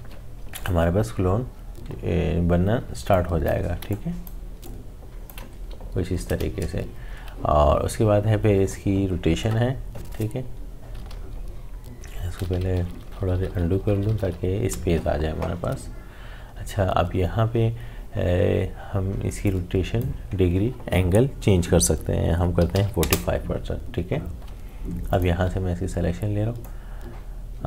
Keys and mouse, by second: 0.5 click, 3.1-7.8 alt+drag, 10.9 click, 11.1 ctrl+z, 19.4-22.3 drag, 24.4-27.6 drag.